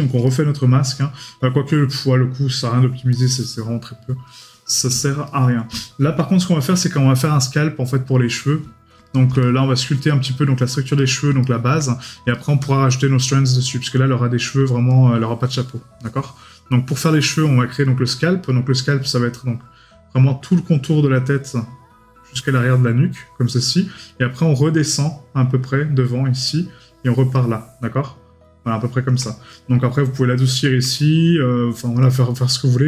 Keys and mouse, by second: 0.3 right click, 2.0 right click, 5.3 right click, 9.0 right click, 11.0 right click, 29.5 right click, 30.8 right click.